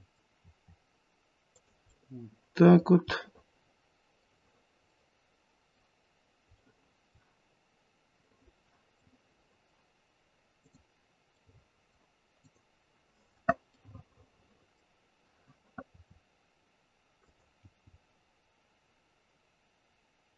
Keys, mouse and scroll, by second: 0.3 r, 1.9 middle click, 2.0 middle click, 2.4 middle click, 2.5 middle click, 3.1-5.4 middle click, 5.2 middle click, 9.1 middle click, 9.1 scroll up 1, 9.2 middle click, 10.6 click, 11.4 middle click, 12.3 click, 13.7 middle click, 14.2 middle click, 14.6 middle click, 15.9 r, 17.6 g.